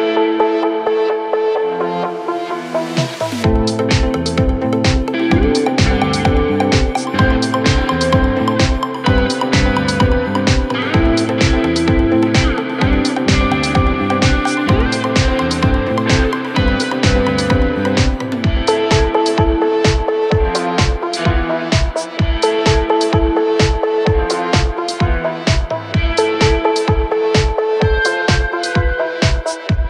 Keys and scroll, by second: 9.4 Left, 15.0 F3, 16.4 c, 16.7 shift+F2, 17.3 Escape.